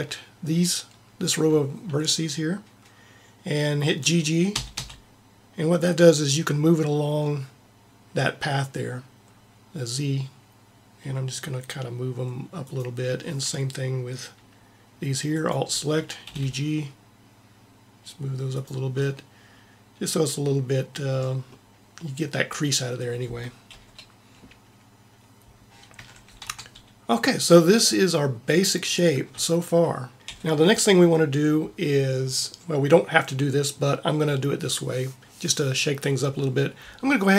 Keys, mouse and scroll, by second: 0.4-2.4 drag, 4.4 g, 4.5 g, 15.2-17.3 drag, 16.2 g, 23.6 KP_1, 23.7 KP_1, 25.9 a, 26.4 Tab, 30.1 KP_3, 30.3 KP_1.